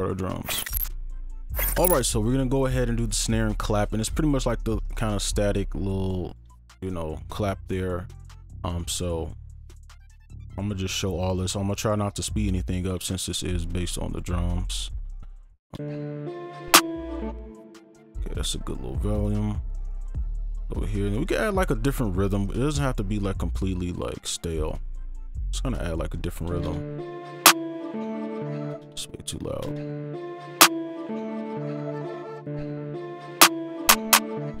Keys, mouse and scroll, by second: 5.3 double click, 12.2 right click, 14.4 ctrl+a, 15.1-15.8 alt+scroll up 1, 15.8 space, 17.3 2, 17.9 shift+click, 19.9 right click, 22.7 right click, 28.4 space, 28.5 ctrl+a, 28.7 space, 29.0-29.7 alt+scroll down 3, 31.9 right click, 32.5 space, 33.9 double click.